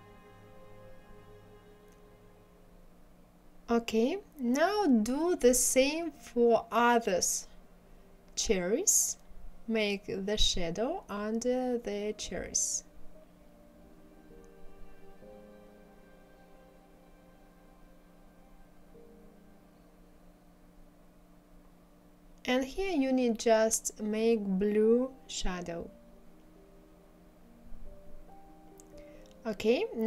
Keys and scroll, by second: 3.3 ctrl+z, 18.7 ctrl+z, 21.6 Delete, 28.2 1.